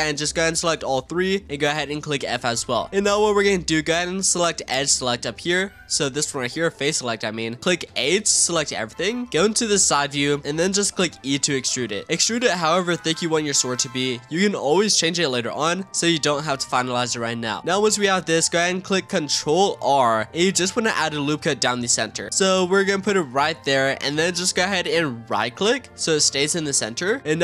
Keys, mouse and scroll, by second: 0.1 shift+click, 0.6 shift+click, 1.0 f, 1.4-2.0 scroll down 15, 2.0-3.3 scroll up 3, 3.3-6.2 shift+middle drag, 6.2-7.8 drag, 7.8 a, 9.6 click, 10.7 e, 15.7-16.2 shift+middle drag, 16.2-16.9 scroll up 4, 16.9-19.8 shift+middle drag, 19.8 ctrl+r, 26.6-27.4 middle drag.